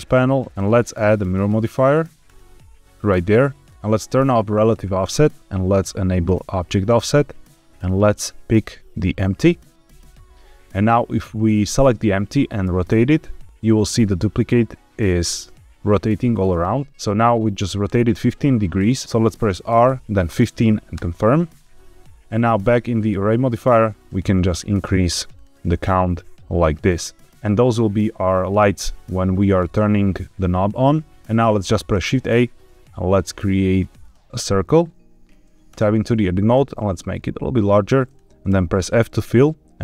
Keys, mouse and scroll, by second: 0.4 click, 1.2-2.3 drag, 3.7 click, 4.5 click, 6.2 click, 6.7 click, 7.7 click, 11.2 click, 12.6 r, 16.9 Escape, 19.0 Escape, 19.6 r, 20.2 KP_1, 20.4 KP_5, 20.9 KP_Enter, 22.4 click, 23.9 click, 24.2 click, 24.4 click, 24.6 click, 24.8 click, 24.9 click, 25.1 click, 25.3 click, 25.4 click, 25.6 click, 26.9 middle click, 29.7-30.4 middle drag, 31.1 shift+a, 31.9 shift+a, 35.6 Tab, 36.9 s, 38.0 click, 38.4 f.